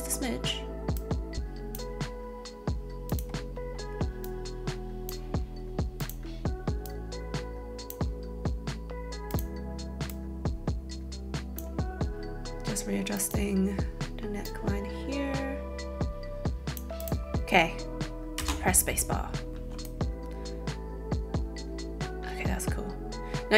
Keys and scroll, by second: 18.4 space.